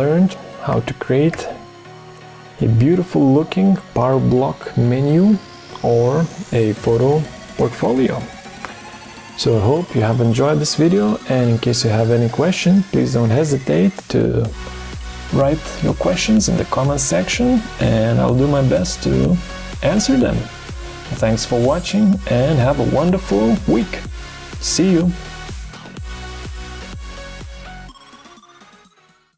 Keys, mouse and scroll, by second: 0.6 Right, 1.3 Right, 29.1 F10.